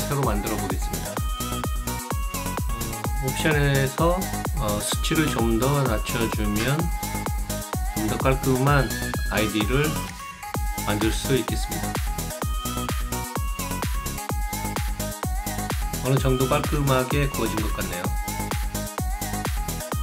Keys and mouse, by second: 2.5 click, 4.0 click, 5.4 click, 7.1 click, 8.8 Return, 10.1 click, 15.5-18.6 alt+drag, 18.9-20.0 alt+drag.